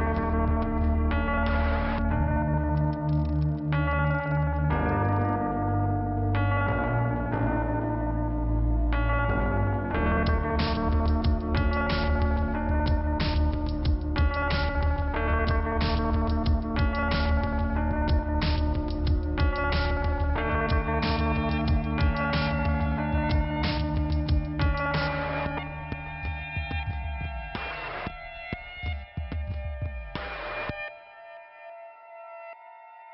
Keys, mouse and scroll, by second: 4.8 click, 5.3 middle click, 6.4 click, 9.0 scroll down 1, 9.9 middle click, 9.9 scroll up 1, 11.3 click, 11.3 scroll down 1, 15.8 click, 16.4 scroll up 2, 17.0 click, 17.2 click, 17.6 click, 19.0 click, 19.1 click, 19.6 click, 21.3 scroll down 1, 23.8-25.0 scroll down 1, 25.9-26.6 scroll up 1, 26.6 click, 27.5 middle click, 28.3 scroll down 1, 30.0 click, 30.9 click.